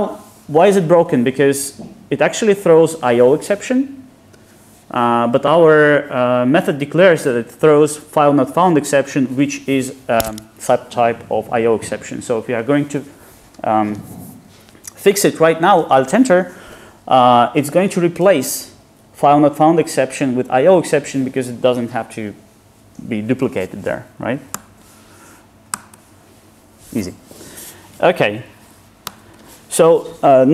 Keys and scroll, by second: 24.6 alt+Return, 29.1 ctrl+shift+super+Return.